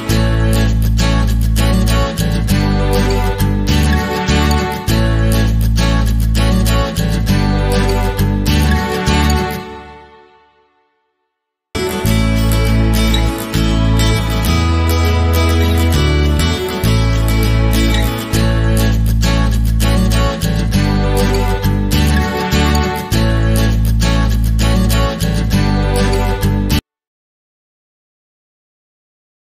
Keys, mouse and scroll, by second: 0.9 click, 1.5 middle click, 2.1 drag, 2.3 middle drag, 2.8 scroll down 1, 2.9-4.3 middle drag, 3.1-3.7 scroll up 1, 3.7 shift+a, 4.1 s, 4.7 click, 5.9-6.7 shift+middle drag, 6.5 scroll down 2, 6.7 click, 6.8 middle click, 6.9 click, 7.0 scroll up 2, 7.1-9.4 shift+middle drag, 7.8 scroll down 2, 9.4 click, 10.4-10.7 scroll down 4, 10.5 middle click, 11.3-12.3 drag, 11.7 KP_1, 11.8 scroll up 1, 12.1 g, 12.5 click, 13.3 scroll up 2, 13.5 shift+middle click, 13.7 click, 14.3 shift+middle click, 14.5 click, 14.9-15.7 middle drag, 15.1-15.7 scroll up 2, 15.7 click, 16.2 click, 16.6-17.3 drag, 17.3-19.6 shift+middle drag, 17.4 scroll down 2, 18.0 KP_0, 18.3-18.8 scroll up 2, 18.8 KP_0, 19.6 click, 21.6 click, 22.3 scroll up 2, 22.5-25.7 middle drag, 23.9 scroll down 1, 24.2-24.9 scroll up 3, 24.9 scroll down 1, 25.7 click, 25.8-27.7 middle drag, 26.0 scroll down 2, 26.2 scroll up 2, 27.7 click, 27.8-29.4 middle drag, 28.0 scroll up 2.